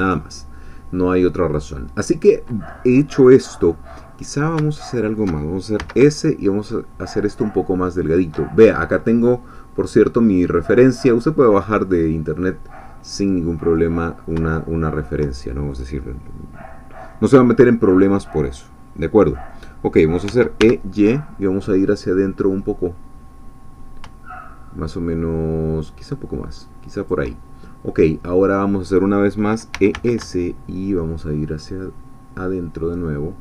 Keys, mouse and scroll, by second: 4.9 alt+shift+click, 5.8 s, 8.1 shift+click, 13.2 middle click, 14.3 shift+middle click, 19.3 middle click, 20.2 e, 20.6 y, 27.0 shift+click, 28.0-29.4 middle drag, 29.5-30.4 typing.